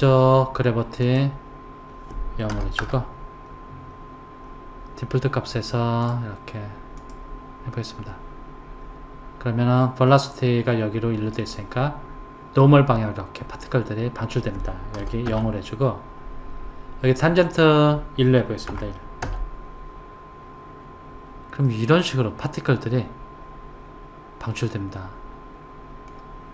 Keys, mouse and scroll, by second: 1.0 click, 3.9-5.3 scroll up 5, 5.3-6.0 scroll up 1, 6.0 click, 7.0 click, 8.7-11.4 scroll up 1, 11.4 click, 17.4 click, 21.6-24.7 middle drag.